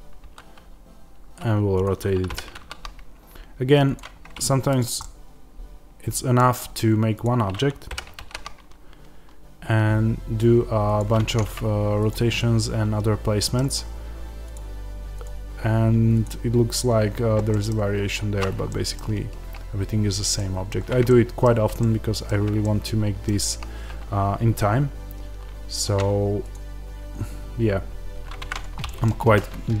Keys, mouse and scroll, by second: 1.7 click, 2.2 g, 3.9 click, 4.1-4.6 scroll, 4.6 click, 4.9-7.1 middle drag, 6.5-7.1 scroll up 2, 7.1 click, 7.8 g, 10.9 click, 11.3-12.0 scroll, 12.0 click, 12.3-14.4 middle drag, 13.7 scroll up 1, 14.4 click, 17.4-26.4 middle drag, 17.9-18.6 scroll down 1, 28.4-29.8 shift+middle drag.